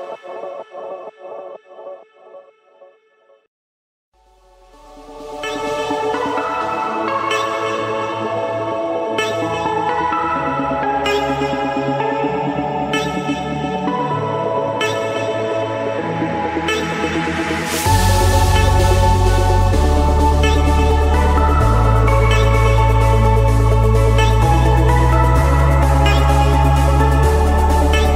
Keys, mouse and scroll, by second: 1.9 click, 3.4 click, 4.1 click, 4.3 click, 4.7-5.2 scroll, 5.2 scroll, 6.0 Return, 6.5 click, 6.9 click, 8.6 j, 10.6 Return, 10.8 click, 11.3-11.8 scroll, 12.0 scroll, 12.7 Escape, 13.4 click, 13.7 click, 14.7 a, 16.1 r, 18.2 Return, 25.4-26.5 drag, 27.1-28.1 drag.